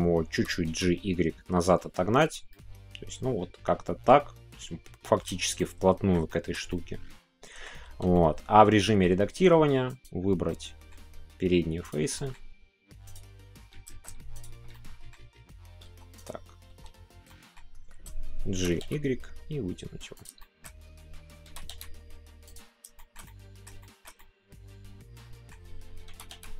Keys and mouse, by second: 2.2 click, 2.2 y, 2.5-4.0 middle drag, 5.5 middle click, 6.2 shift+middle click, 6.7-7.9 middle drag, 7.9 Tab, 8.1 middle click, 9.9 click, 10.5 middle click, 11.8 ctrl+click, 12.2 middle click, 13.1 click, 14.7 middle click, 15.8 Tab, 16.2-16.7 drag, 16.7 Tab, 17.2 middle click, 18.5 g, 20.1 click, 20.3-22.8 middle drag, 23.0 shift+middle click, 23.8-25.5 shift+middle drag.